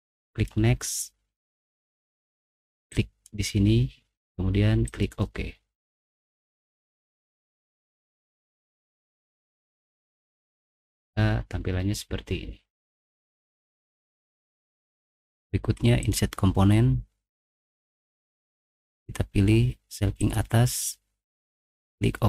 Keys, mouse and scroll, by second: 4.8 click, 8.1 middle click, 8.8 middle click, 8.8-9.8 scroll up 2, 9.5 middle click, 13.2 middle click, 13.5 middle click, 13.5 scroll down 2, 13.8 middle click, 13.8 scroll up 2, 16.0 click, 17.8 click, 18.4 middle click, 20.2 click, 21.4 click.